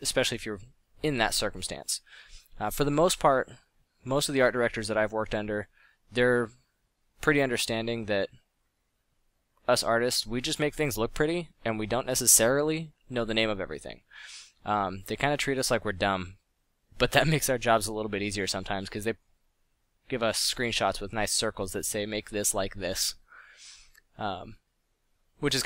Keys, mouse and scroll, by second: 0.8 f, 2.3 click, 7.3 f, 13.6 f, 14.6 f, 15.0 f, 16.9 f, 18.0 f, 22.1 f, 24.4 f.